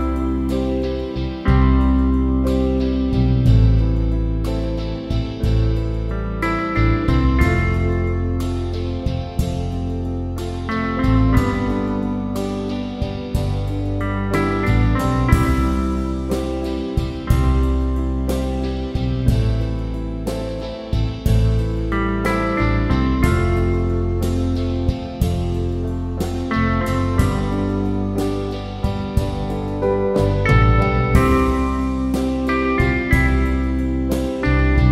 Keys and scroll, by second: 9.1 Return.